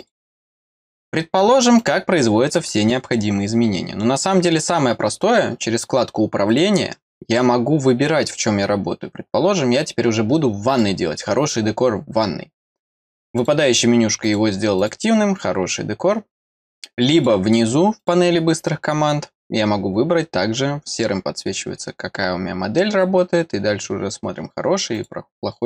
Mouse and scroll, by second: 0.0 click, 1.8 click, 6.5 click, 10.7 click, 11.6 middle click, 11.9 middle click, 13.3-14.8 drag, 17.1 click, 18.0 click, 24.9 click.